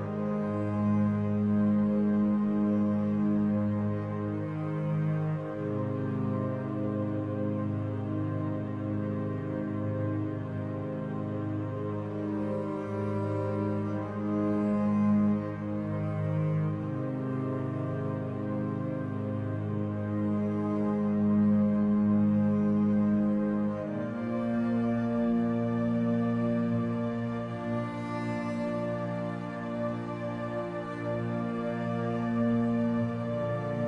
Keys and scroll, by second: 17.2 ctrl+0, 31.0 ctrl+t.